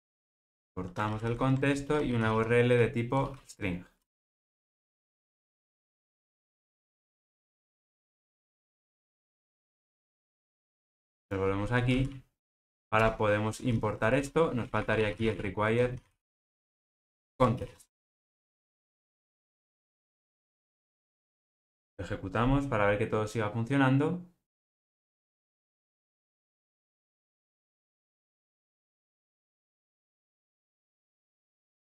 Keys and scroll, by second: 5.4 Tab, 12.4 alt+Return, 17.3 Return.